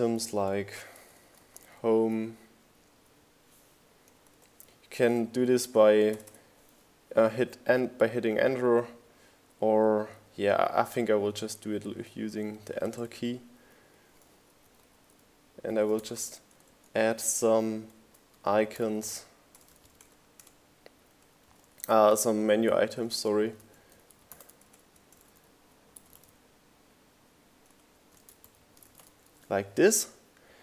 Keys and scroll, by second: 0.6 BackSpace, 1.1 Return, 1.8 BackSpace, 8.0 Right, 8.5 Return, 9.9-12.3 typing, 13.5-22.4 typing, 18.6 Return, 23.3 Return, 23.6-25.4 typing, 28.0 Return.